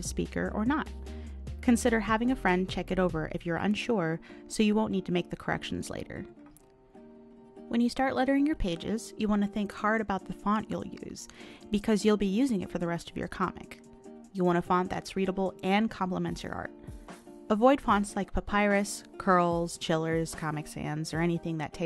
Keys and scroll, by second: 1.1 ctrl+z, 4.0 ctrl+z, 5.6 ctrl+z, 8.5 ctrl+z, 13.6 ctrl+z.